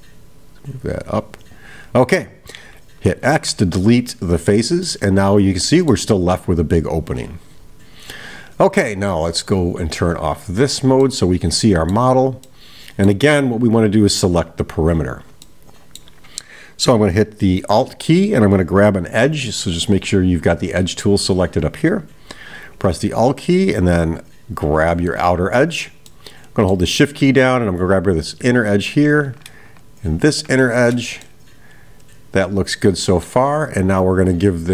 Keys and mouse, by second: 4.9-6.0 middle drag, 10.2 click, 11.0-12.1 middle drag, 12.5-13.3 middle drag, 15.4 middle click, 20.6 click, 24.4 alt+click, 26.1-26.9 middle drag, 31.3-33.4 middle drag.